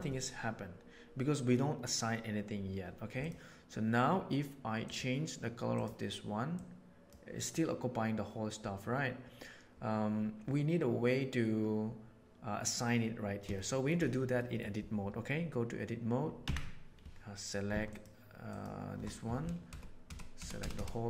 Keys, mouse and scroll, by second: 3.1 click, 4.8 click, 5.7 click, 13.5-13.8 shift+middle drag, 14.3 middle click, 16.3 Tab, 18.4 click, 19.6 ctrl+KP_Add, 20.0 ctrl+KP_Add, 20.3 ctrl+KP_Add, 20.5 ctrl+KP_Add, 20.7 ctrl+KP_Add.